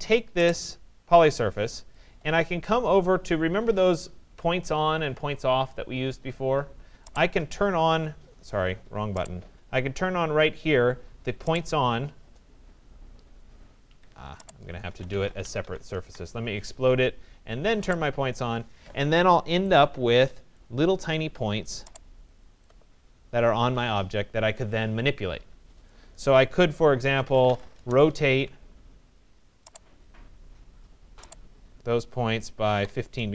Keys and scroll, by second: 8.3 Escape, 13.4 Escape, 16.1 Return, 27.3 Return, 32.3 5, 33.2 Return.